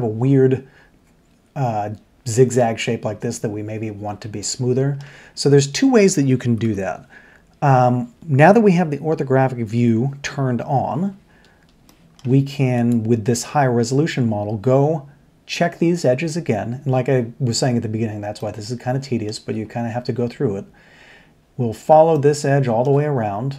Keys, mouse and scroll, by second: 4.4 middle click, 6.6 1, 9.7 KP_3, 11.9 shift+middle click, 13.8 middle click, 18.4 shift+middle click, 22.1 shift+middle click.